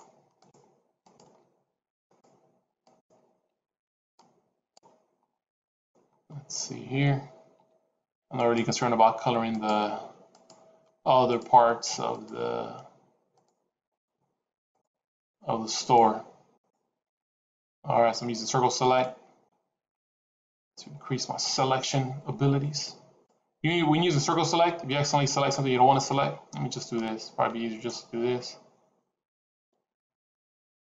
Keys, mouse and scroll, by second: 0.2 shift+click, 0.9 shift+click, 2.2 shift+click, 2.7 shift+click, 3.4 c, 5.8-6.4 scroll up 2, 6.4-7.0 scroll up 1, 7.4 c.